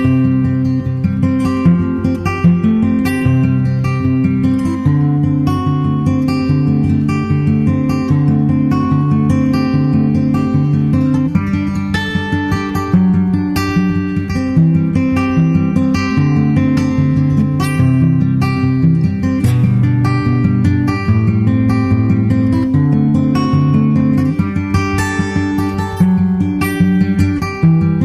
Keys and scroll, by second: 1.5 super+Tab, 2.1 super+Tab, 2.2 super+Tab, 2.4 super+Tab, 10.2 super+Right, 15.1 super+Left, 15.4 shift+super+Right, 15.6 super+c, 16.0 super+v, 16.3 super+v, 24.9 super+Right, 27.5 super+Tab, 27.7 super+Tab.